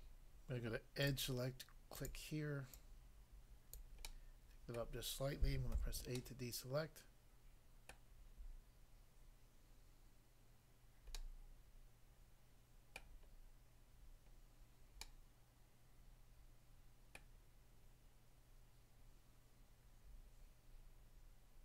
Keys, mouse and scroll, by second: 1.0 click, 1.1 click, 1.9 click, 2.0 click, 2.7 click, 3.8 click, 4.0 middle click, 4.8 middle click, 5.7 a, 6.2 middle click, 7.9 middle click, 11.2 middle click, 13.0 middle click, 13.3-14.2 scroll down 1, 14.4 scroll down 1, 15.0 middle click, 17.1 middle click.